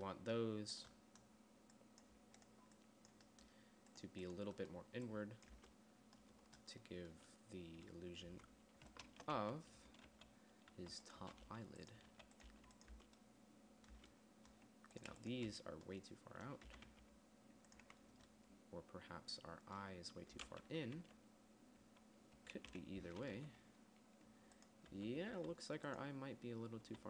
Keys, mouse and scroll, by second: 1.1 click, 6.0 Tab, 8.7 Tab, 9.5-13.0 typing, 13.4 Tab, 14.3 Tab, 17.1 g, 18.2 Tab, 21.4 KP_3, 23.1 KP_1, 23.9 z, 25.4 z, 25.8 z.